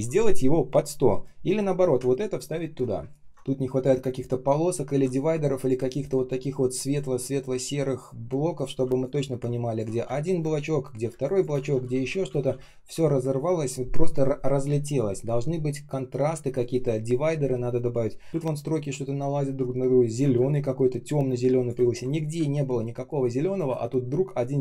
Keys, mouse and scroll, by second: 2.0-2.5 ctrl+scroll down 1, 2.9 space, 3.2 ctrl+scroll up 1, 3.2 space, 5.8 ctrl+shift+x, 8.9 alt+click, 10.0 space, 11.0 space, 11.6 ctrl+я, 20.0 ctrl+click, 20.3 space, 20.8 space, 20.8 space, 21.8 ctrl+scroll down 1, 22.3 space, 22.8 space, 22.8 space, 23.7 ctrl+scroll up 1, 24.3 ctrl+scroll down 1.